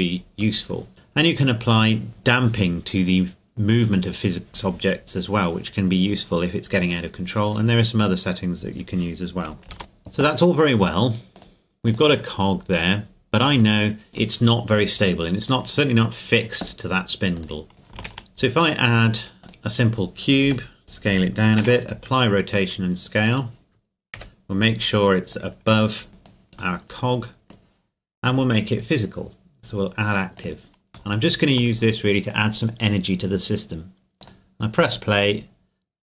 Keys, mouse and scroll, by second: 2.9-4.8 scroll down 1, 9.5 ctrl+Num_Lock, 9.5 scroll down 1, 9.7 ctrl+s, 9.8 right click, 11.3 click, 14.3 middle click, 15.7-17.3 scroll down 2, 17.3 click, 17.7 ctrl+a, 19.4 click, 20.4 s, 21.1 click, 21.6 ctrl+a, 23.3 click, 24.1 KP_7, 25.3 click, 26.8 middle click, 30.3 click, 31.1 shift+middle click, 32.0-33.0 scroll up 2, 33.0-34.2 scroll down 2, 34.2-35.3 drag.